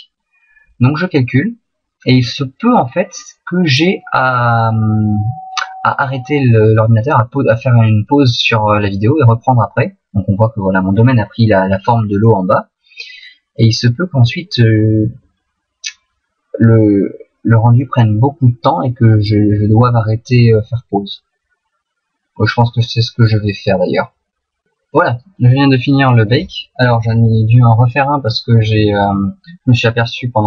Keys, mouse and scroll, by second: 12.0 middle click, 18.4 middle click, 28.0 middle click.